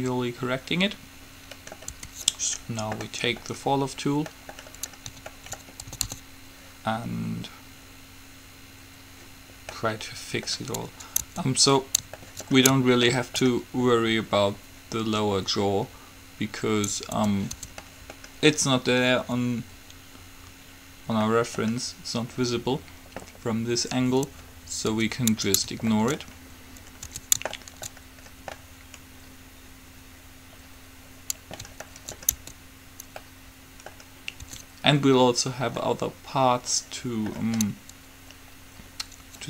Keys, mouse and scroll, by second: 2.1 Tab, 2.8 middle click, 3.3-4.6 middle drag, 6.1 a, 6.2 a, 11.5 Tab, 17.4 Tab, 17.7 Tab, 21.5 middle click, 25.1 Tab, 27.3 Tab, 32.1-36.5 middle drag, 32.6 Tab, 34.6 Tab.